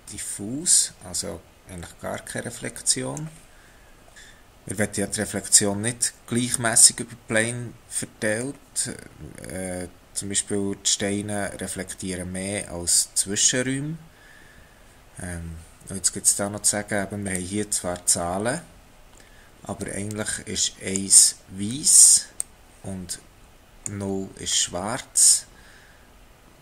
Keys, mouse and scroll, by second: 4.1 middle click, 9.0-10.0 scroll up 2, 10.0-13.1 scroll up 1, 17.3 click, 22.3 click.